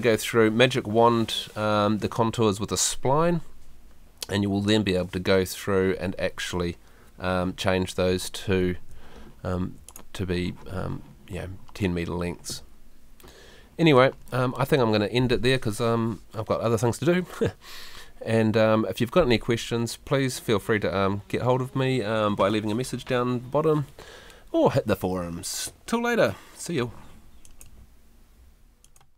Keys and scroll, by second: 8.7 Escape.